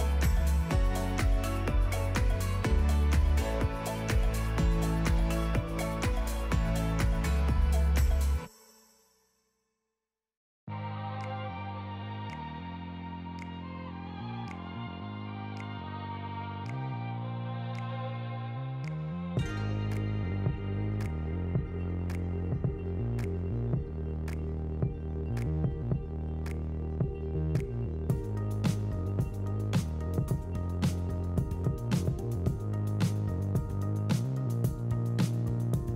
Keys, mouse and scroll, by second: 0.7 click, 1.3 click, 1.4 click, 1.7-2.2 drag, 2.6 ctrl+s, 3.3-3.6 scroll down 2, 3.6 click, 4.0 scroll down 1, 4.4-6.7 typing, 5.0-5.5 drag, 6.0 click, 7.0 click, 7.5-8.0 scroll up 4, 8.0 r, 8.9 click, 9.4 r, 10.8 g, 11.5 r, 12.1-12.5 scroll up 3, 12.5 z, 12.8 r, 14.1 g, 14.8 r, 15.4 g, 16.9 click, 17.1 h, 17.7 scroll down 3, 17.9-18.3 scroll up 5, 18.0 ctrl+s, 18.4 click, 18.6 g, 19.9 r, 20.6 g, 21.5 ctrl+s, 21.6 r, 22.1 ctrl+s, 22.2 z, 22.8 click, 23.0 click, 24.1 click, 24.3 click, 25.6 click, 27.1 click, 27.8-29.6 typing, 27.9 scroll up 3, 28.0 drag, 28.1 click, 28.1 Tab, 28.8 middle click, 29.2 scroll up 5, 29.4 ctrl+r, 30.2 Tab, 30.3-31.1 scroll down 6, 30.4 ctrl+s, 30.5 middle click, 30.8 KP_0, 31.1 scroll up 1, 31.2 click, 31.4 click, 32.3 click, 33.3 click, 33.4 click, 34.5 click.